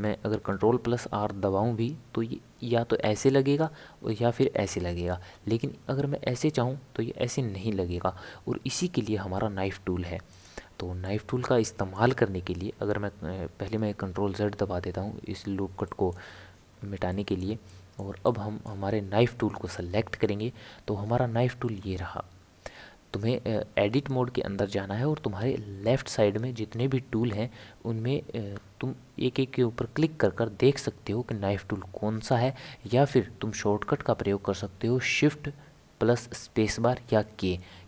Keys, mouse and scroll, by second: 0.5 ctrl+r, 11.0-12.7 middle drag, 12.7 ctrl+z, 14.0 ctrl+z, 14.4 ctrl+z, 15.8-21.3 middle drag.